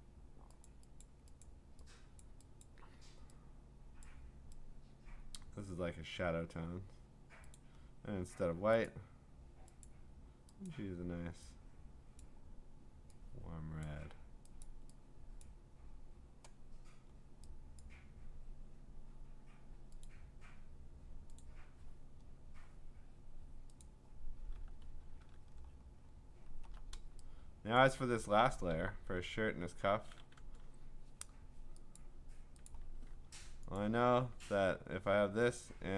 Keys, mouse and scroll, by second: 0.7 click, 1.0 click, 1.4 click, 2.2 click, 2.6 click, 4.0 click, 5.4 click, 7.6 click, 8.8 click, 9.9 click, 10.7 click, 12.2 click, 13.8 click, 14.6 click, 15.5 click, 17.8 click, 20.0 click, 21.4 click, 23.8 click, 25.3 middle click, 25.4 scroll up 6, 25.7-26.1 scroll down 11, 26.5 scroll up 3, 27.5-28.1 scroll, 27.8-30.8 click, 32.0 click, 32.7 click, 33.8 ctrl+click, 33.9 ctrl+click, 35.6 click.